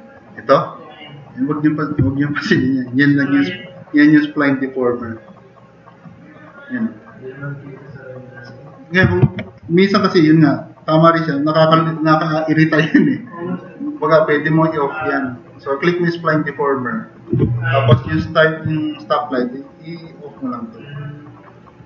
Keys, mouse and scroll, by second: 6.0-7.0 drag, 7.3 drag, 7.7 click, 8.2-8.9 drag, 9.3 ctrl+z, 18.1 super+=.